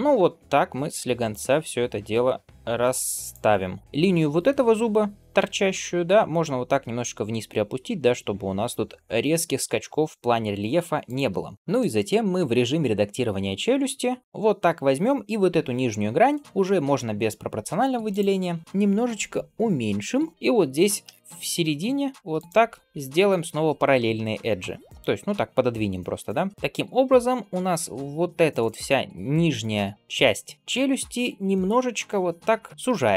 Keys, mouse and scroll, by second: 3.8 g, 11.3 scroll down 1, 11.5 click, 11.6 middle click, 12.2 Tab, 17.9 click, 18.6 s, 20.3 middle click, 20.6 g, 26.0 middle click.